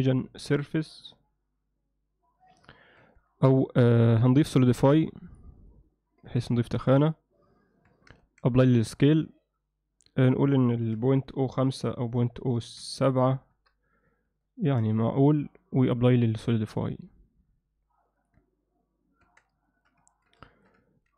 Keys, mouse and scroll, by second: 3.0 Tab, 4.3 click, 4.7-5.4 drag, 5.7-6.4 alt+middle drag, 6.6 Tab, 7.9 Tab, 8.2 ctrl+a, 10.4-14.2 drag, 14.6-15.3 alt+middle drag, 16.1-18.3 drag, 19.3 Tab, 19.7 middle click, 20.1 ctrl+middle click, 20.5 shift+middle click, 20.9 middle click.